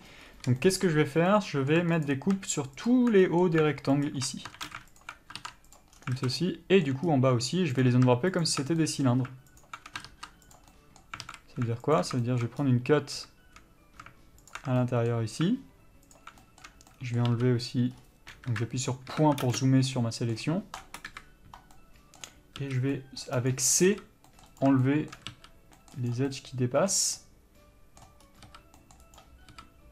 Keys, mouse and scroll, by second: 0.0 middle click, 0.4-0.8 scroll up 1, 0.8 shift+middle click, 1.2 scroll down 1, 1.5 middle click, 2.3 alt+click, 3.4 shift+middle click, 4.3 alt+shift+click, 4.8 ctrl+z, 5.2 alt+shift+click, 6.0 ctrl+e, 6.2 scroll down 1, 6.4 alt+a, 6.6 middle click, 7.3-8.1 scroll up 1, 8.1 alt+click, 9.0 shift+middle click, 9.8 alt+shift+click, 10.8 ctrl+e, 10.9 middle click, 11.5 alt+a, 12.2 alt+click, 12.4 shift+middle click, 12.8-14.7 scroll up 1, 14.7 alt+shift+click, 15.0 shift+middle click, 16.4 alt+shift+click, 16.6 shift+middle click, 17.0 scroll down 1, 17.1 middle click, 17.5 shift+c, 18.1 scroll up 1, 18.7 KP_3, 19.3 KP_Decimal, 19.7 ctrl+space, 19.7-24.5 middle drag, 20.5-21.3 scroll down 2, 21.3 KP_Decimal, 21.9 scroll up 2, 23.2 c, 24.8 right click, 25.0-29.9 shift+middle drag, 26.0 c, 28.4 scroll up 1, 29.0 c.